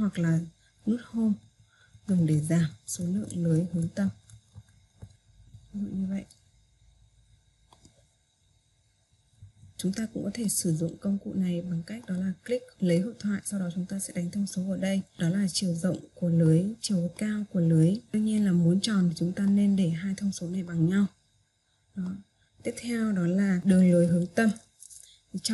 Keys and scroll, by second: 1.6 Home.